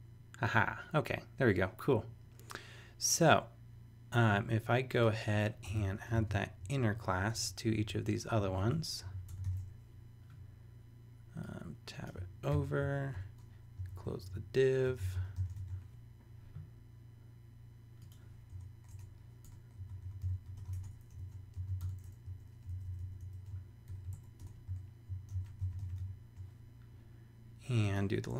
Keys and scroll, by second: 5.9 shift+super+Left, 6.1 shift+super+c, 6.6 super+Down, 8.4 super+Down, 8.5 super+Right, 8.7 super+Return, 9.3 super+BackSpace, 9.4 super+v, 12.5 super+], 12.9 super+Right, 13.1 Return, 13.8 super+Return, 14.8-15.8 typing, 18.5 Return, 18.9 Tab, 19.4-21.1 typing, 21.6 shift+super+c, 21.8 super+BackSpace, 22.3 Down, 23.5 shift+super+Down, 23.9 shift+super+], 24.1 super+Right, 24.4 Return, 25.2-26.3 typing.